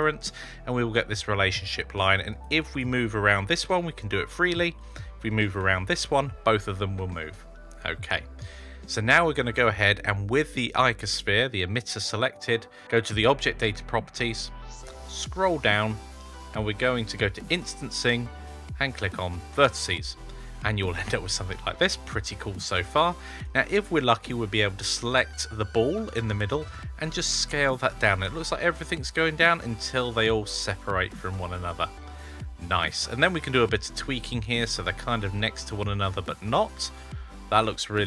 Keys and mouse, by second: 2.2 click, 3.1 g, 4.6 click, 5.5 g, 17.3 click, 19.4 click, 26.4 s, 33.1 s, 33.8 shift+click.